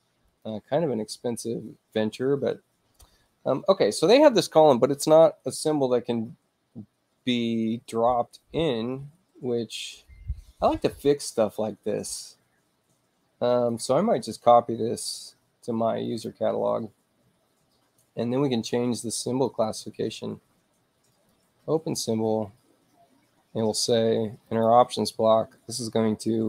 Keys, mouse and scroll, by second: 0.3 click, 10.0-10.6 scroll down 2, 12.6-12.9 scroll up 2, 13.5 right click, 16.0 click, 17.6 middle click, 17.6 scroll down 2, 19.4 right click, 21.1 click, 24.5 click.